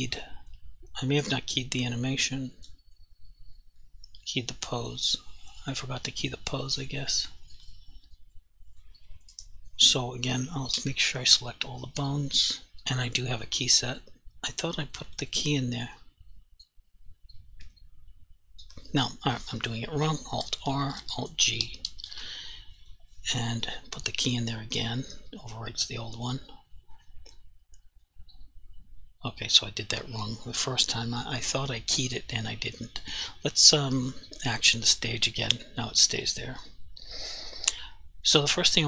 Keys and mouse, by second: 3.9 click, 6.8 click, 10.8 a, 13.7 click, 21.0 alt+r, 21.7 alt+g, 24.7 alt+g, 28.1 click, 34.7 click.